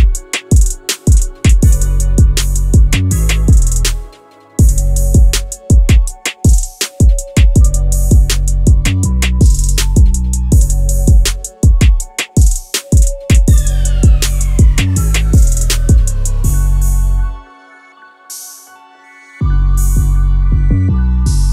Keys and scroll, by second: 1.6 w, 5.9 q, 16.8 Escape.